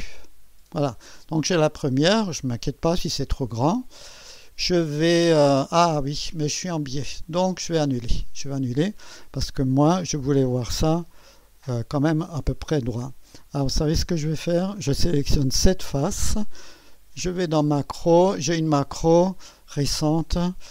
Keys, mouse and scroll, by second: 0.0 click, 1.3-2.6 scroll down 2, 2.6-4.3 scroll down 1, 4.3-6.7 scroll down 1, 7.8 click, 11.4 click, 13.0-14.9 drag, 15.7-16.8 drag, 17.5-18.5 drag.